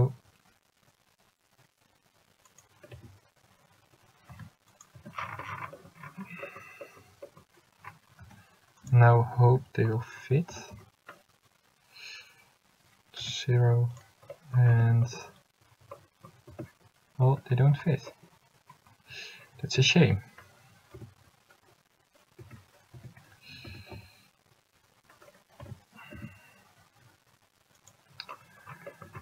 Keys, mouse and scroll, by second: 3.1 a, 4.8 c, 8.9 c, 10.7 s, 14.1 click, 14.9 Tab, 16.7 Tab, 19.9 a, 21.1 l, 22.5 a, 23.1 l, 23.9 s.